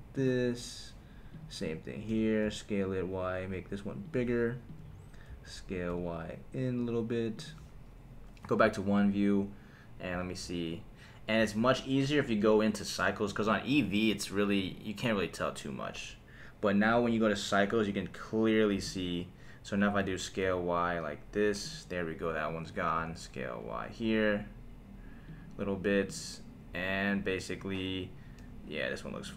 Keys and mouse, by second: 0.2 click, 1.3 click, 2.1 s, 2.4 y, 4.0 click, 4.7 click, 5.3 s, 5.9 y, 7.4 click, 8.4 KP_1, 12.1 click, 13.3-14.8 drag, 18.8 click, 20.0 s, 20.4 y, 21.6 click, 22.4 click, 22.9 s, 23.7 y, 25.2 click, 26.0 click, 28.4 s, 29.1 click.